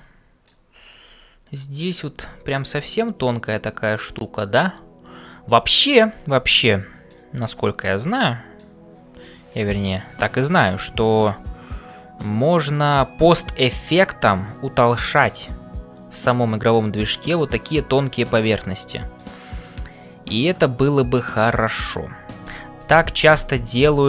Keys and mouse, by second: 0.0-24.0 typing, 2.9-7.2 middle drag, 7.8 middle click, 9.5-11.1 middle drag, 17.2-19.3 middle drag.